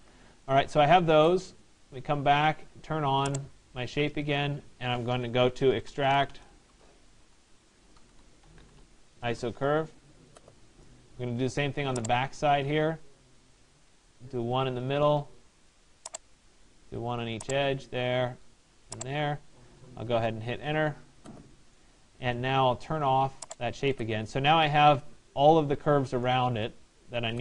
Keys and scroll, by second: 6.4 BackSpace, 19.9 Return.